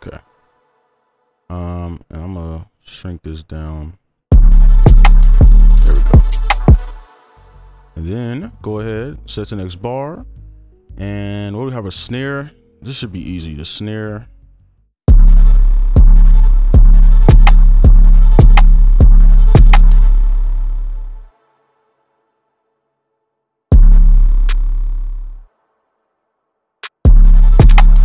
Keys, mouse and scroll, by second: 4.3 space, 5.5 right click, 6.8 space, 8.3 right click, 12.8 right click, 13.9 scroll up 1, 15.2-17.8 typing, 18.1 right click, 18.9 space, 19.4 double click, 20.1 right click, 21.7 double click, 23.9 space, 27.0 space.